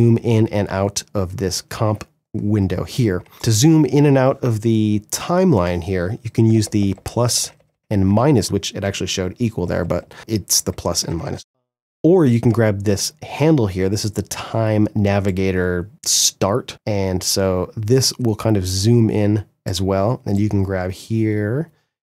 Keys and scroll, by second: 6.0 =, 9.2 =, 10.4 -, 11.3 KP_Add.